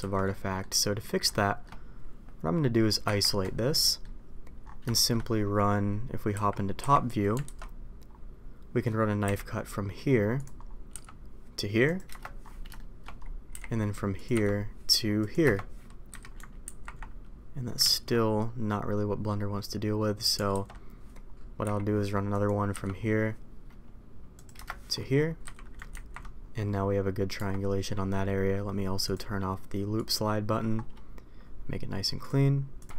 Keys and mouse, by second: 0.2 middle click, 1.2 shift+middle click, 3.8 middle click, 4.9 middle click, 6.3 KP_7, 6.7 KP_5, 7.4 alt+a, 9.2 k, 12.7 shift+middle click, 13.5 k, 16.0 a, 16.6 ctrl+t, 17.8 ctrl+z, 20.5 alt+a, 21.6 k, 25.4 a, 25.9 ctrl+t, 27.3 Tab, 29.0 click, 29.9 click, 32.1 click.